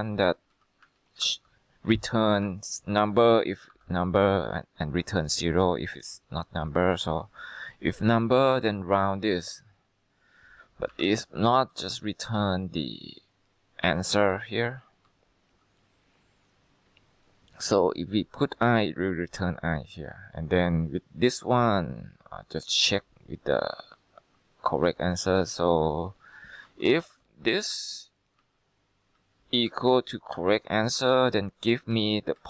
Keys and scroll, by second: 0.4 Right, 0.6 Right, 0.9 Left, 1.3 F2, 2.0 Left, 2.3-4.8 typing, 11.0-11.7 typing, 13.8-14.5 typing, 15.0 Return, 26.3-27.7 typing, 27.8 Down, 28.5 Left, 29.8 =, 30.5 c, 31.1 ,, 32.0 Right.